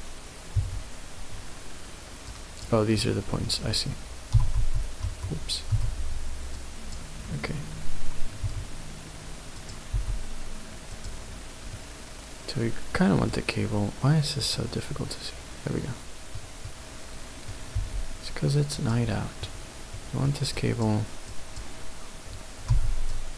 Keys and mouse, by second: 0.5 w, 2.3 click, 4.3 v, 5.7 b, 8.4 s, 9.5 click, 10.0 g, 11.0 click, 11.7-13.3 middle drag, 14.5 click, 15.0 middle click, 16.7 middle click, 17.7 g, 18.7 click, 19.1 middle click, 20.0 middle click, 20.5 click, 21.3 click, 22.7 b.